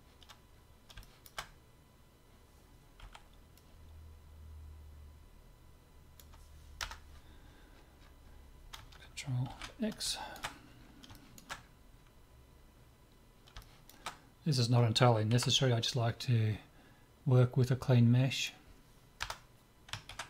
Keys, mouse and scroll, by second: 3.1 c, 7.1-9.1 middle drag, 9.5 ctrl+x, 10.1-16.3 middle drag, 15.3 c, 20.1 ctrl+x.